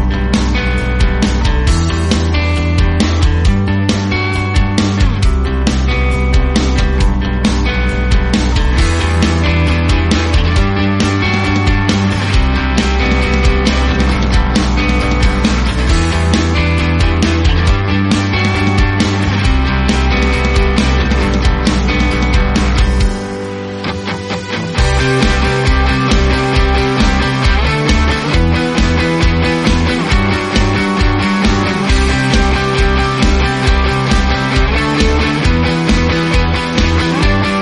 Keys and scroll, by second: 0.4 f, 6.9 shift+a, 7.5 g, 9.4-10.8 typing, 11.4 Return, 12.9 Left, 13.4 -, 13.6 Return, 14.2 space, 14.5 space, 16.6 space, 17.2 Tab, 17.9-18.7 typing, 18.1 Tab, 27.4 space, 30.3 ctrl+g, 30.8 Tab, 32.6 ctrl+c, 35.6 ctrl+v.